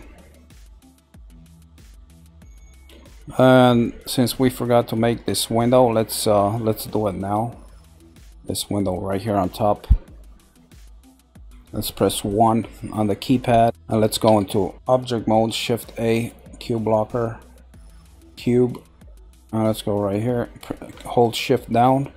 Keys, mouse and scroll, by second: 0.4 middle click, 1.3-1.8 scroll down 3, 1.8-4.8 middle drag, 9.6-10.3 scroll up 3, 10.3-12.2 middle drag, 12.2 KP_1, 13.6 shift+middle click, 13.6 shift+a, 14.2 Tab, 15.4 shift+a.